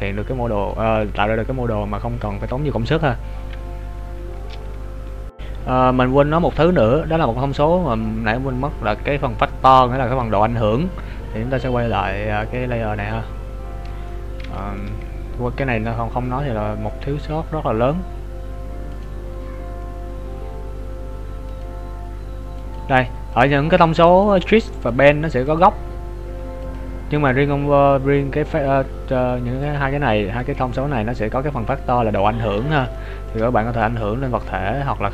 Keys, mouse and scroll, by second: 12.5 click, 13.1 right click, 13.2-14.3 scroll down 5, 14.3 middle click, 17.3-17.7 scroll up 2, 19.1 click, 32.9 shift+middle click, 33.7 click.